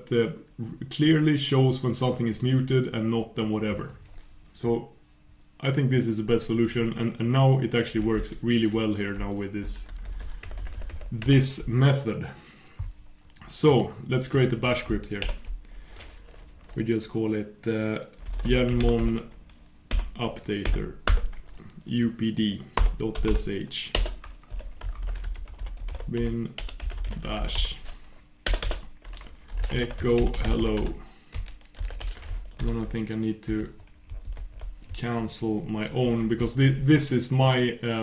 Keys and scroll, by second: 32.8 super+y.